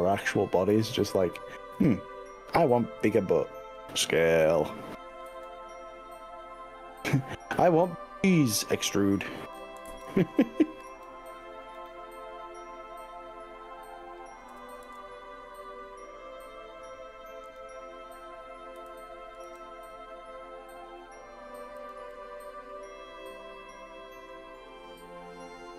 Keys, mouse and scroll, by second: 0.9 x, 3.1 g, 4.1 s, 5.3 z, 9.5 click, 9.9 ctrl+z, 10.9 z, 14.5 s, 14.9 z, 17.5 click, 18.8 g, 19.5 z, 21.9 click, 22.1-23.9 middle drag, 23.9 click, 24.1-25.7 middle drag.